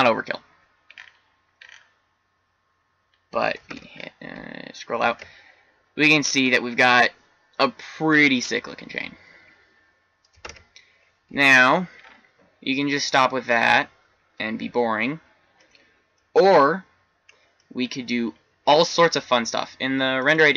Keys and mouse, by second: 3.7 shift+z, 5.0 shift+z, 10.6 shift+z, 11.9-12.8 middle drag, 19.4-20.5 middle drag.